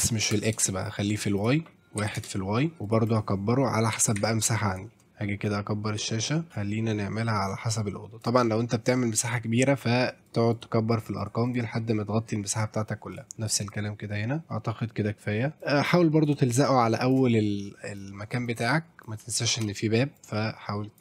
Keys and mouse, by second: 1.4 click, 2.9 click, 3.1 click, 4.0 KP_7, 4.2 shift+z, 5.5-5.9 drag, 5.9 middle click, 6.3 click, 7.0 click, 7.4 middle click, 7.8 click, 10.3 click, 10.5 click, 10.9 click, 11.2 click, 11.5 click, 13.1 click, 13.6 click, 15.6 ctrl+click, 16.6 ctrl+click, 18.0 click, 19.1 ctrl+click, 19.5 ctrl+middle click, 20.2 ctrl+click.